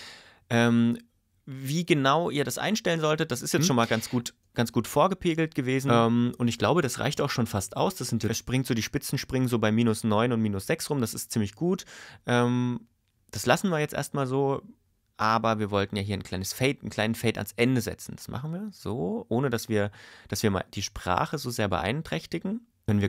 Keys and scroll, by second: 3.5 space, 5.8 space, 8.3 space, 22.8 space.